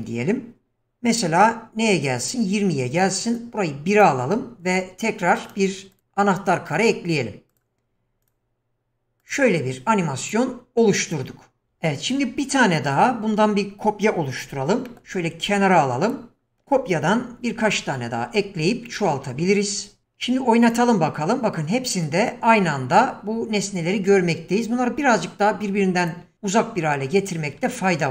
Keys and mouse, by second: 0.7-2.3 drag, 3.3-4.1 drag, 5.3 right click, 7.5 click, 9.2 click, 10.3 click, 14.5 shift+d, 16.4 shift+middle click, 17.4 shift+r, 17.6 shift+r, 18.2 shift+r, 18.4 shift+r, 20.7 click, 21.9 click.